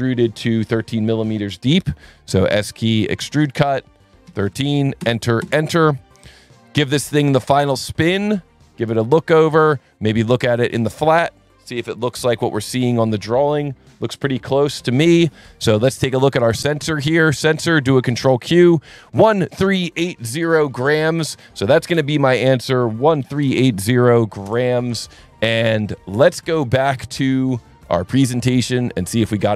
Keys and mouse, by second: 3.0 click, 4.2 KP_1, 4.4 KP_3, 5.0 KP_Enter, 5.4 KP_Enter, 6.2 click, 10.7 click, 16.0 click, 17.4 click, 18.1 ctrl+q, 22.3 click, 23.0-24.1 typing, 24.4 Return, 26.3 click.